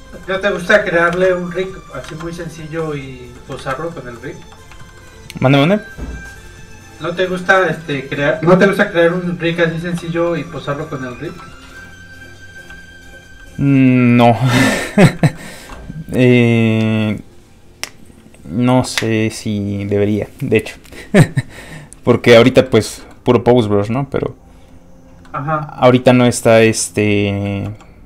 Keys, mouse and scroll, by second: 0.0 middle click, 0.5 h, 1.1 ctrl+z, 1.6 h, 2.1 ctrl+z, 2.4 middle click, 2.9 shift+h, 3.6 ctrl+z, 3.9 middle click, 4.4 f, 4.6 click, 4.8 shift+middle click, 5.0 middle click, 7.4 middle click, 9.9 shift+f, 10.1 click, 10.4 middle click, 10.5 shift+middle click, 11.3 shift+middle click, 11.5 middle click, 12.7 f, 12.9 click, 15.3 shift+middle click, 23.0 middle click, 23.1 middle click, 23.7 click, 25.2 middle click, 26.5 shift+middle click, 26.8 middle click, 26.9 middle click, 27.6 f, 27.8 click.